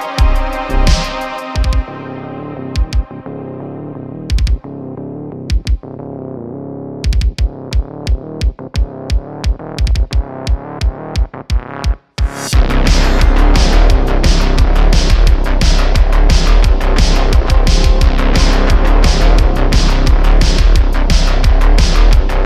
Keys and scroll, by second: 1.0 shift+d, 1.2 x, 5.1 n, 5.5 n, 7.0 Tab, 8.7 i, 9.8 s, 10.5 z, 12.6 e, 14.0 Tab, 16.2 Tab, 17.2 super+r, 18.1 Tab.